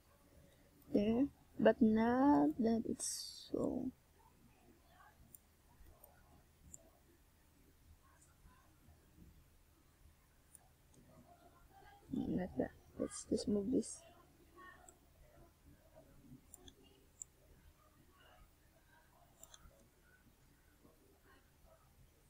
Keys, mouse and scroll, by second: 0.8 click, 1.7 shift+right click, 6.7 click, 7.4 right click, 8.0 shift+right click, 9.3 click, 9.9 a, 12.3 right click, 12.7 a, 13.7 a, 14.7 KP_7, 16.0-16.6 scroll down 4, 17.7 click, 18.9-19.4 shift+scroll down 2, 20.1 scroll down 1, 21.0 a, 21.6 a.